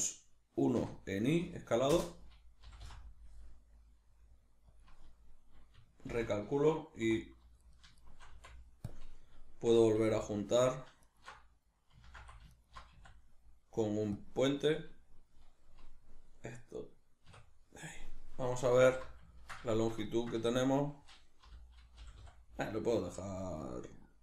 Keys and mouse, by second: 4.8 click, 6.1 shift+n, 7.0 3, 7.6 alt+right click, 8.0 alt+shift+right click, 8.3 x, 10.2 alt+right click, 11.0 alt+shift+right click, 12.0 ctrl+z, 12.5 alt+shift+right click, 12.9 w, 17.3 \, 18.7 alt+q, 19.3-23.7 ctrl+middle drag, 21.5 l, 23.7 click.